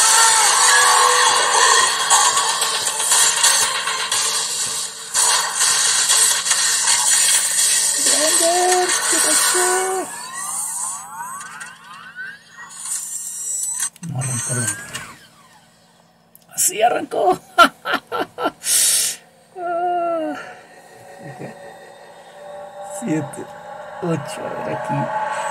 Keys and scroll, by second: 23.5 super+8.